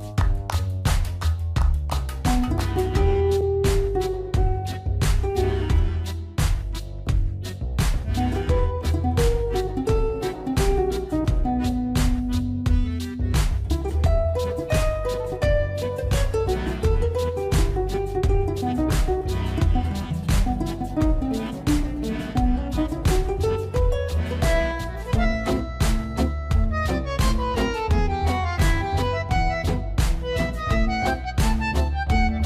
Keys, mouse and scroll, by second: 0.0 click, 8.2 x, 10.3 click, 11.9-19.2 middle drag, 20.5 click, 22.5 click, 24.9 click, 30.7 shift+click.